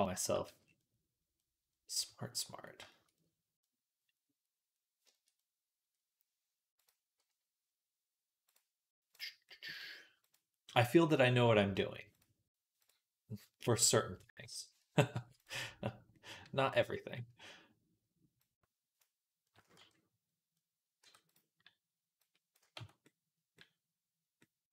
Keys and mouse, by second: 0.3 z, 0.6-1.8 drag, 1.8-3.4 right drag, 3.5 right click, 3.7-19.6 right drag, 8.9 click, 12.0 click, 18.3-19.6 drag, 18.3-19.6 middle drag, 19.6 Tab, 20.9 Tab, 21.2 right click, 22.6 Tab.